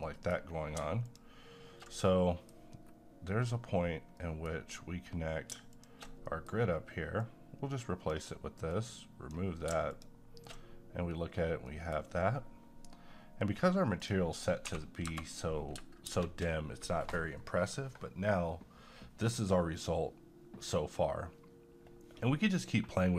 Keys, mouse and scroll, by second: 0.1 middle click, 0.3-0.8 scroll down 1, 1.1 ctrl+shift+click, 2.0 middle click, 2.7 scroll up 1, 4.2 middle click, 5.7 click, 6.2 middle click, 7.5-8.2 drag, 9.0-9.6 drag, 11.7 middle click, 12.2 scroll down 1, 14.0 click, 14.6 2, 16.1 space.